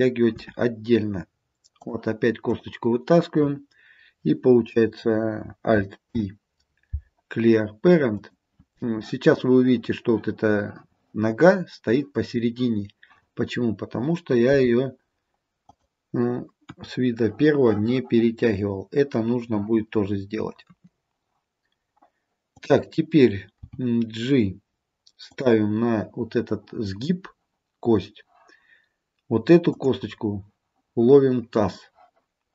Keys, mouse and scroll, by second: 0.5 e, 2.6 click, 6.1 alt+p, 14.6 g, 16.7 KP_1, 20.7 KP_3, 22.6 click, 23.7 g, 29.8 click.